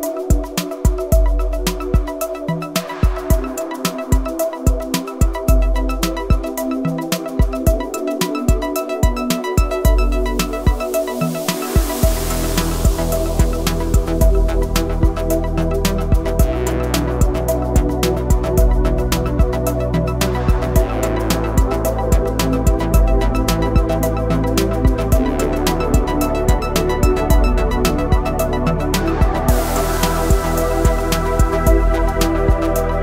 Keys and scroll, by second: 2.3 Tab, 7.7 KP_7, 15.9 Tab, 18.7 s, 23.5 Escape, 24.3 d, 25.5 Escape, 26.0 a, 27.5 y, 30.9 s.